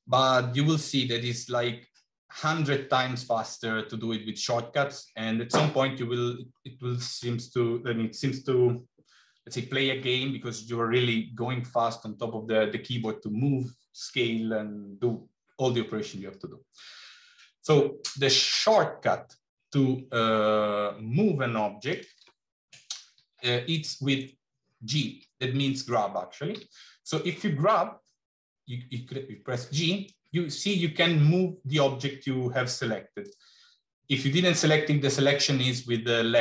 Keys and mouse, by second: 16.9 middle click, 26.4 g.